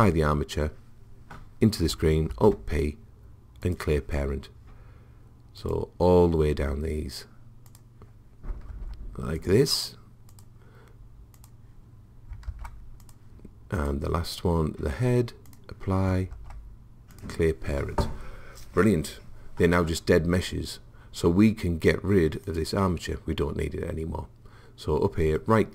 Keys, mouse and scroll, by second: 2.3 alt+p, 5.6 click, 7.4 click, 7.7-8.8 drag, 8.8 alt+p, 12.3 click, 12.5 alt+p, 16.0 click, 16.4 alt+p, 22.5 click, 25.3-25.7 right drag.